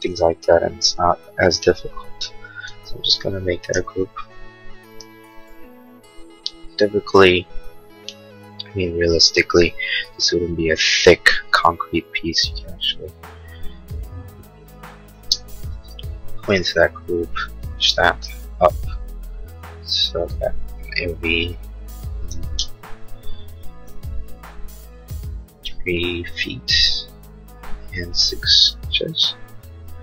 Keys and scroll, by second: 2.5 space, 3.8 g, 12.8 p, 15.2 space, 17.1 p, 22.0-22.9 typing, 24.3 3, 26.4 ', 27.9 BackSpace, 28.2 6, 28.8 Return.